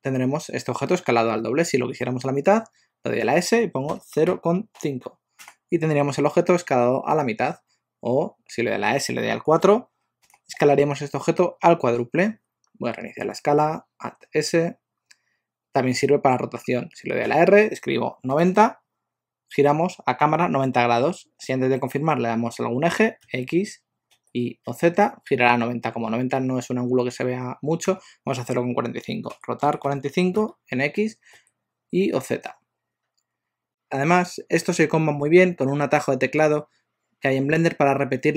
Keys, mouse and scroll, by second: 3.2 s, 8.9 s, 13.4 alt+s, 17.2 r, 29.3 r.